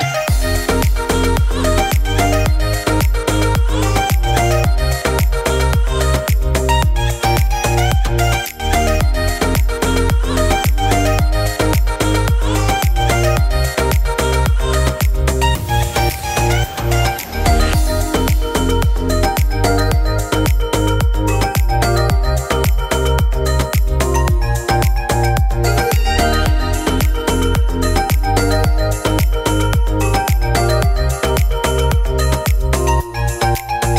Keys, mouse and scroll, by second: 4.7 click, 5.2 click, 5.7 click, 6.5 click, 6.8 click, 13.7 scroll up 3, 13.8 shift+middle click, 14.1 middle click, 14.4 click, 15.0 Tab, 15.3 shift+middle click, 15.5 middle click, 25.5 scroll up 2, 25.8 shift+middle click, 26.7 2, 27.6 alt+click, 28.6 middle click, 30.6 middle click, 31.7 click.